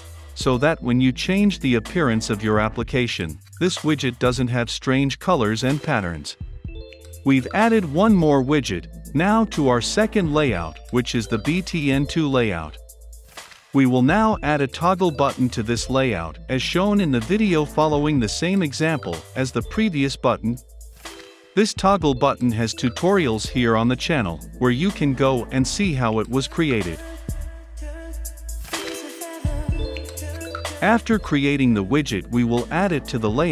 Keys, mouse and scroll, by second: 0.8-7.0 drag, 7.1-10.7 typing, 7.4 ctrl+z, 7.6 click, 7.8 Return, 8.4 Return, 9.5 Return, 12.9-14.5 typing, 14.2 Return, 14.9 Return, 15.5-16.0 scroll down 2, 16.0 click, 17.0-19.4 scroll down 2, 19.4-19.8 drag, 19.8-21.8 scroll down 2, 21.8 click, 21.9 ctrl+space, 22.3 Return, 22.4 ctrl+z, 22.5 Return, 22.5 ctrl+space, 22.6 Return, 22.6 Left, 22.7 Right, 23.3 click, 23.4 ctrl+c, 23.5 click, 23.5 ctrl+v, 23.6 <, 23.7 click, 24.0 ctrl+c, 24.1 click, 24.1 ctrl+v, 24.2 click, 24.4 ctrl+c, 24.4 Right, 24.5 Return, 24.5 ctrl+space, 24.8 Down, 24.9 Return, 25.1 ctrl+v, 25.2 click, 25.4 d, 25.6 o, 25.7 Right, 25.8 Return, 25.9 ctrl+space, 26.0 Down, 26.2 Return, 26.2 Left, 26.7 ctrl+v, 26.9 click, 27.0 Return, 27.3 click, 27.4-28.5 typing, 27.7 click, 28.6 click, 28.7 ctrl+space, 28.8 Down, 28.9 Up, 28.9 Return, 28.9 Left, 30.6 click, 30.9-32.0 scroll down 2, 32.0 click, 33.2 ctrl+c, 33.4 click.